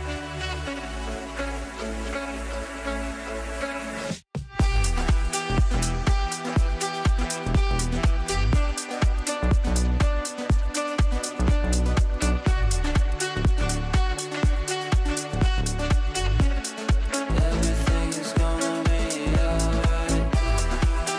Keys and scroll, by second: 9.1 shift+Page_Down.